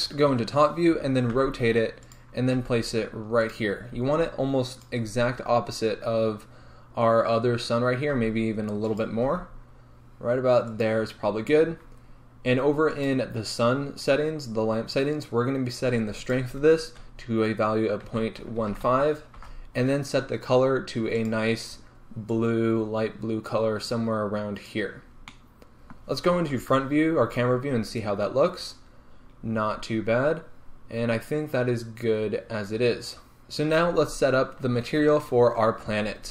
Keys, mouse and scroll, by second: 0.3 KP_7, 1.4 r, 2.2 click, 2.6 g, 3.6 click, 4.0 r, 4.9 click, 8.2 r, 9.1 click, 9.3 g, 10.9 click, 13.0 click, 16.3-21.4 drag, 19.5 Return, 25.2 scroll down 1, 25.4-36.3 middle drag, 26.1-26.6 scroll up 2, 26.6 KP_0, 27.7-29.6 scroll up 2, 29.6-30.1 scroll down 2, 30.1-31.7 scroll up 2, 31.7-32.2 scroll up 1, 32.2-33.4 scroll down 2, 33.4-36.3 scroll up 2.